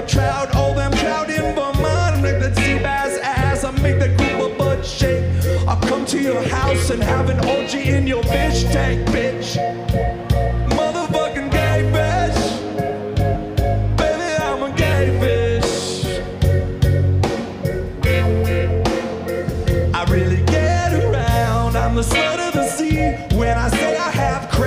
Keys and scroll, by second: 3.1-3.4 scroll, 4.0-4.3 scroll, 6.8 scroll, 9.4-9.8 scroll, 11.0 scroll, 11.6-12.5 scroll, 13.0-13.4 scroll, 13.7-14.3 scroll, 15.1 scroll, 16.0 scroll, 18.1-19.5 scroll, 21.8-22.2 scroll, 24.1-24.6 scroll.